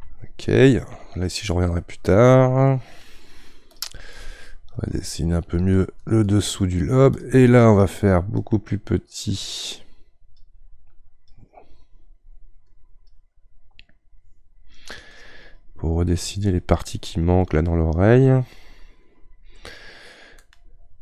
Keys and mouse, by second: 1.6-3.7 middle drag, 3.7-9.7 drag, 9.7-15.3 right drag, 15.3-17.5 drag, 17.5-19.0 middle drag, 19.0-21.0 drag.